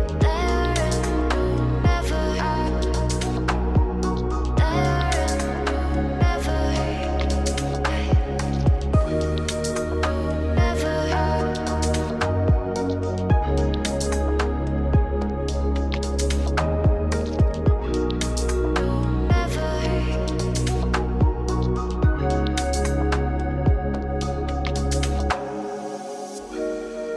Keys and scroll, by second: 23.4 ctrl+space.